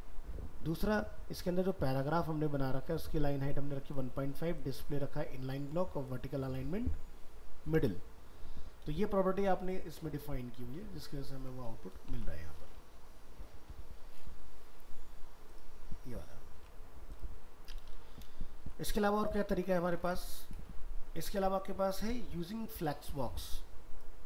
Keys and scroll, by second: 11.0 ctrl+s, 12.1 alt+Tab, 16.4 alt+Tab, 17.9 ctrl+w, 18.6 alt+Tab, 19.5 ctrl+w.